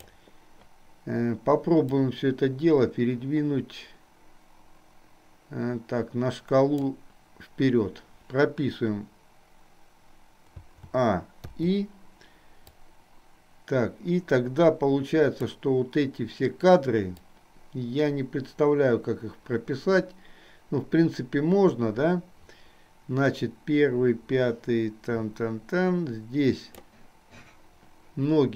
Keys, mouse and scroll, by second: 2.2-7.1 drag, 10.7 a, 11.7 i, 12.8-15.6 drag, 17.3-27.1 drag.